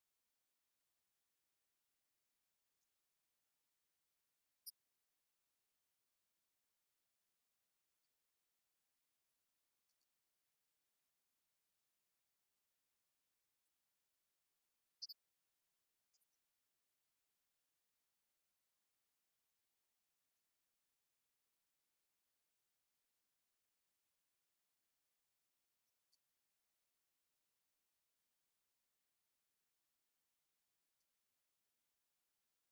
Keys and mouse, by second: 2.5 click, 5.0 click.